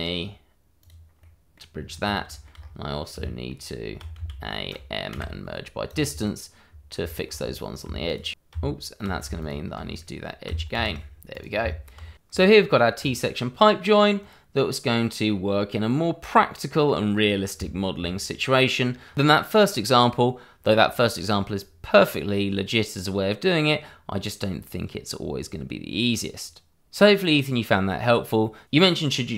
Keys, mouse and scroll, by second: 0.8 click, 1.2 middle click, 1.7-2.0 scroll down 1, 2.5-3.1 scroll up 1, 3.1 Tab, 3.2 middle click, 3.6 Tab, 4.1 a, 5.1 m, 5.8 click, 7.1 shift+middle click, 7.3-8.0 shift+scroll up 1, 8.0 alt+click, 8.2 click, 8.5 Tab, 9.4 alt+click, 10.7 shift+e, 11.3 click, 11.6 Tab, 12.4 click, 12.9 middle click, 13.3-13.9 scroll up 1, 13.9 middle click, 14.5 middle click, 17.7 Tab, 18.4 ctrl+r, 19.1 click, 19.3 e, 19.8 f, 21.4 click, 22.3 ctrl+r, 22.5 click, 22.9 e, 23.9 click, 24.2 ctrl+r, 24.7 click, 24.8 e, 25.3 f, 25.8 click, 26.6 click, 26.8 scroll up 1, 27.1 ctrl+b, 27.5-28.2 scroll down 1, 28.5 click, 28.8 q.